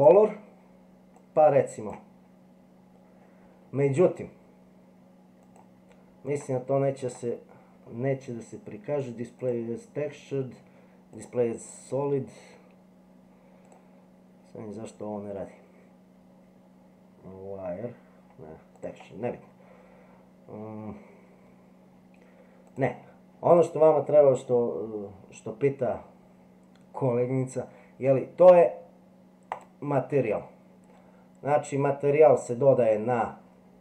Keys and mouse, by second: 5.6 click, 6.4 click, 7.0 click, 9.4-11.3 drag, 13.6-18.9 drag, 22.7 click, 29.5 click.